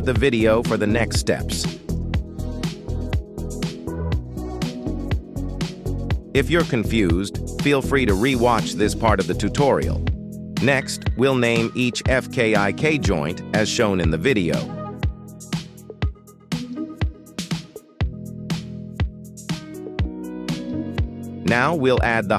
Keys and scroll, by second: 0.1 shift+n, 2.5 shift+n, 5.3 shift+n, 10.7 F2, 11.6 b, 11.9 o, 12.3 m, 12.6 Return, 14.4 F2, 14.9 a, 15.2 r, 15.6 m, 16.0 Return, 17.7 F2, 18.4-20.0 typing, 20.3 Return.